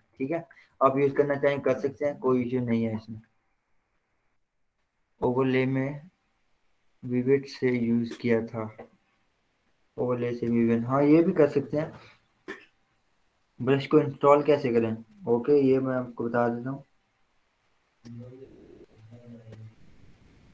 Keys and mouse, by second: 1.2 z, 2.9-12.9 drag.